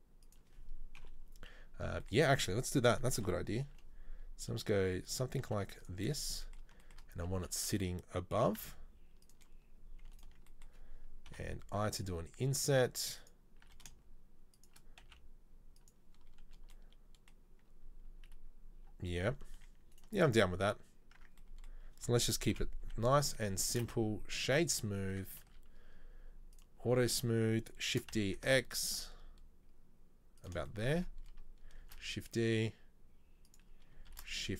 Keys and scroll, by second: 1.2 KP_7, 3.2 KP_7, 3.7 g, 5.4 s, 8.4 s, 13.6 e, 15.0 s, 21.2 Tab, 22.5 KP_7, 22.9 z, 23.9 space, 25.3 Tab, 25.5 a, 28.0 shift+d, 31.9 shift+d, 34.2 shift+d.